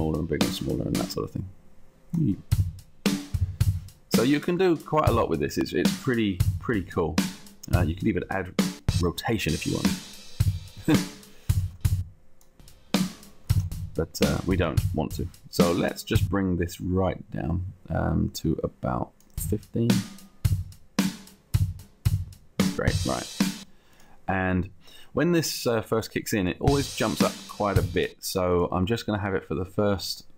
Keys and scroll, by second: 4.7 ctrl+z, 11.7 ctrl+z, 15.6 ctrl+z.